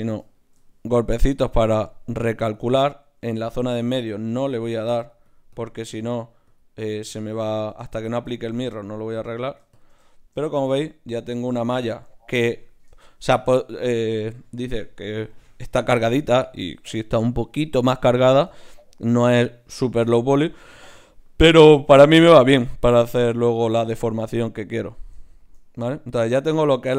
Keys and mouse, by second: 3.2 ctrl+z, 3.4 ctrl+z, 4.2 ctrl+z, 5.0-11.5 drag, 9.3-11.5 right drag, 11.5-23.1 middle drag.